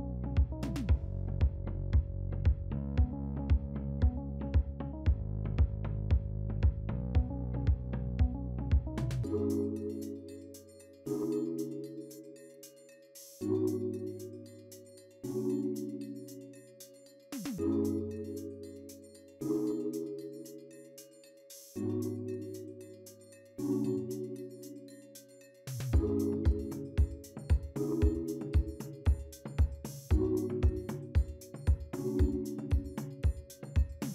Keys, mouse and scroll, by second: 0.3-1.7 scroll down 1, 1.8 double click, 9.4 ., 9.8 2, 10.0 Return, 12.8 scroll up 2, 15.0 scroll down 2, 16.1 scroll up 1, 17.7 middle click, 18.6-19.9 scroll up 1, 19.9-22.6 scroll down 2, 22.6 scroll up 3, 24.1-24.8 scroll down 2, 25.4 scroll down 1, 25.5-26.3 scroll up 2, 26.3-26.9 scroll down 2, 28.2 0, 28.3 Return, 29.4-30.2 typing, 32.1 middle click, 32.1 middle click, 32.9-33.6 scroll up 2, 33.7 scroll down 2.